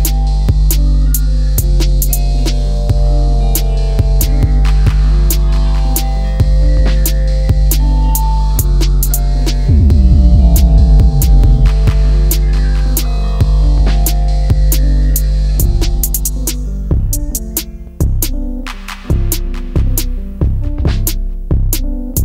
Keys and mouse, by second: 1.1 click, 2.2-3.7 drag, 4.8 ctrl+z, 6.3-8.2 drag, 8.7 click, 11.0-13.3 drag, 14.7-16.5 drag, 17.2 ctrl+z, 17.4 ctrl+z, 17.8 ctrl+z, 18.0 ctrl+z, 18.3 ctrl+z, 18.5 ctrl+z, 18.7 ctrl+z, 19.0 ctrl+z, 20.0 s, 21.4 click.